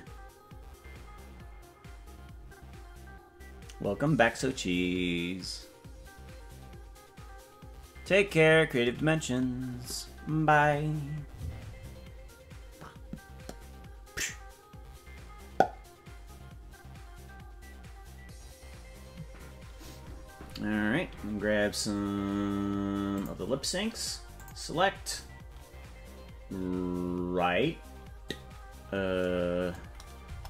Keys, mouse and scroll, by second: 23.2 click, 24.4 click, 30.3 KP_0.